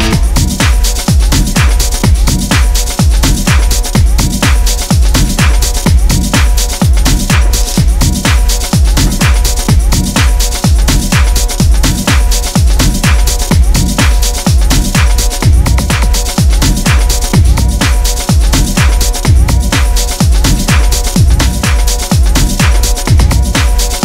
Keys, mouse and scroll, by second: 0.0 ctrl+r, 0.8 Escape, 0.9 click, 1.3 ctrl+r, 1.8 click, 2.2 click, 2.7 scroll down 2, 3.0 click, 3.3 click, 3.4 right click, 3.8-5.2 drag, 5.4 scroll up 1, 5.5 click, 5.6 right click, 5.9 click, 6.1 scroll down 2, 6.3 scroll up 1, 6.4 click, 7.3 click, 9.2 click, 10.7 scroll down 2, 10.9 KP_7, 11.0 KP_1, 11.5 scroll up 1, 11.7 click, 12.1 click, 12.3 scroll up 1, 12.3 scroll down 1, 12.5 g, 13.7 click, 13.8 scroll down 2, 14.0 KP_7, 14.2 KP_1, 14.5-14.9 scroll up 4, 14.9 scroll down 3, 15.1 click, 15.3 scroll up 2, 15.6 scroll down 1, 15.7 g, 16.2 scroll up 1, 16.5 s, 17.4 scroll down 2, 17.5 click, 18.1 g, 19.3 KP_7, 19.4 KP_1, 19.7 scroll up 5, 19.9 s, 20.8 scroll down 4, 21.0 click, 21.4 click, 21.6 click, 21.8 scroll up 2, 22.0 click, 23.1 click, 23.5-23.9 scroll down 2, 23.9 click.